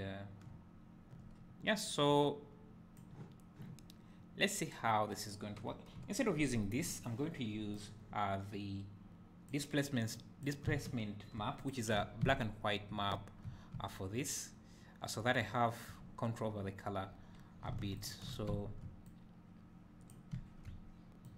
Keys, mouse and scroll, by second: 2.0 click, 5.2 click, 6.2 Delete, 10.1 click, 11.6 ctrl+shift+click, 12.3 `, 18.0 ctrl+shift+click, 19.0 click, 21.2-21.3 drag.